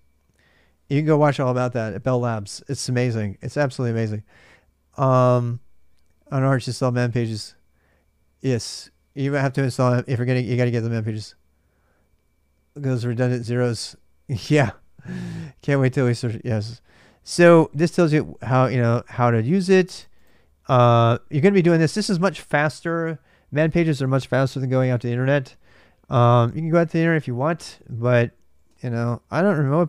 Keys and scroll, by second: 4.2 typing, 27.5-29.8 typing.